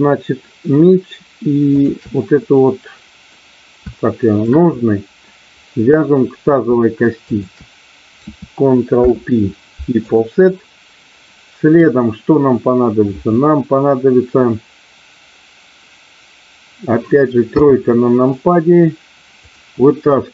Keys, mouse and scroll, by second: 1.7 shift+click, 2.3 middle click, 4.0 shift+middle click, 4.8 middle click, 7.2 shift+click, 9.0 ctrl+p, 11.2-12.3 middle drag, 17.5 KP_3, 19.3 click.